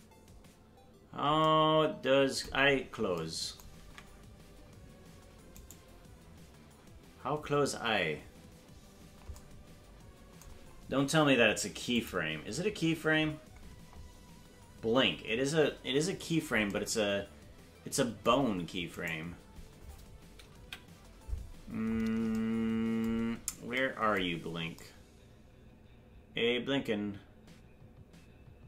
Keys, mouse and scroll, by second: 2.6-3.2 scroll down 4, 3.8 ctrl+Tab, 5.6-7.8 right drag, 11.9 click, 13.1-13.8 scroll down 11, 13.9-14.5 scroll up 1, 14.5-15.0 scroll up 5, 19.0-20.6 right drag, 20.6 KP_Decimal, 21.8-22.2 scroll up 6, 23.2 scroll down 1, 24.3-24.7 scroll down 2.